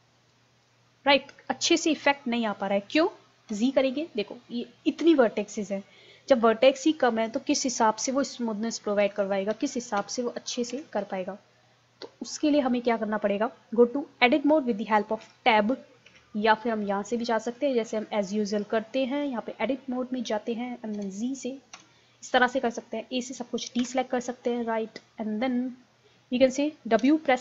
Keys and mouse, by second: 3.5 z, 3.9-6.1 middle drag, 8.0 z, 9.1 ctrl+z, 9.5 ctrl+z, 10.0 ctrl+z, 10.7 ctrl+z, 15.3 Tab, 16.1 Tab, 16.8 click, 21.0 z, 21.8 z, 23.8 a, 27.0 w.